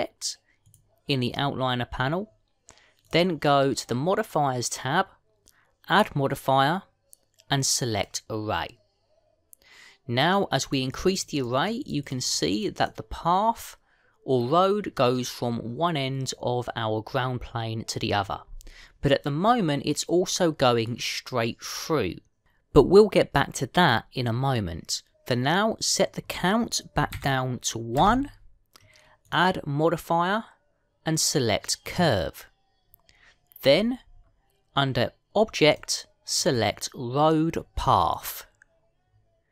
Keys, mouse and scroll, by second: 1.5 click, 3.9 click, 8.9 click, 9.3 click, 11.5-11.9 click, 11.8 click, 12.7 click, 12.9 click, 13.1 click, 14.6 click, 20.3 middle click, 26.7 click, 32.8 click, 34.5-35.8 scroll down 6, 35.8 scroll down 1, 36.5 click.